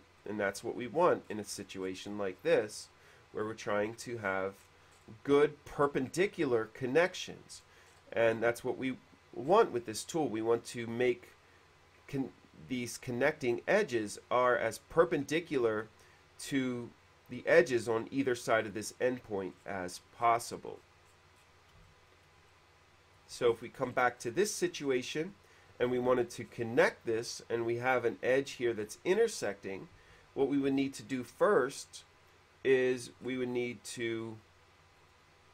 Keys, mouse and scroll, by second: 0.7 click, 1.5 middle click, 2.1 middle click, 2.5 middle click, 4.5 middle click, 4.5-4.9 scroll up 1, 4.9 middle click, 5.5 middle click, 7.3 middle click, 7.8 middle click, 9.7 middle click, 19.7 middle click, 20.1 middle click, 20.9 middle click, 22.1 shift+middle click, 22.7 shift+middle click, 23.7-24.6 scroll up 1, 24.6 middle click, 24.9 middle click, 26.6 middle click, 27.4 middle click, 28.7 middle click, 29.3 click, 30.2 q, 31.3 click, 31.9 q, 33.5 middle click, 35.1 click.